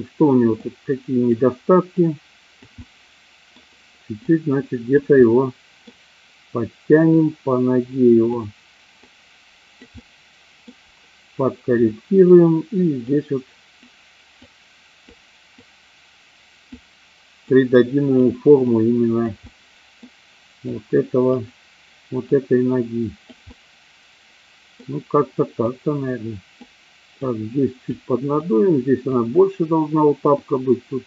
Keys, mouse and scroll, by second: 0.6 click, 2.0 click, 2.8 middle click, 4.2 click, 5.1 middle click, 7.1-8.2 drag, 9.0 click, 10.0 middle click, 13.1 click, 14.3 click, 15.5-16.6 drag, 17.3 click, 18.6 click, 19.5 middle click, 20.6 click, 22.2 click, 23.4-24.7 middle drag, 25.6 click, 27.3 click, 28.4 click, 30.4 click.